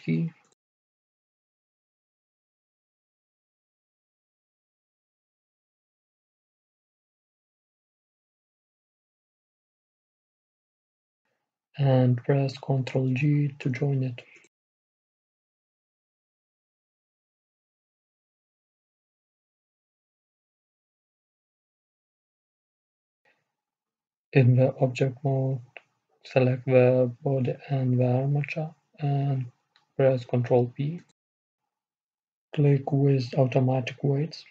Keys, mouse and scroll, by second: 1.1 e, 8.7-13.3 right drag, 13.3 ctrl+j, 17.4-21.7 middle drag, 18.1 a, 19.3 Tab, 21.7-27.5 right drag, 27.5 shift+a, 28.6 a, 28.9 a, 29.8-32.1 middle drag, 33.1 ctrl+p.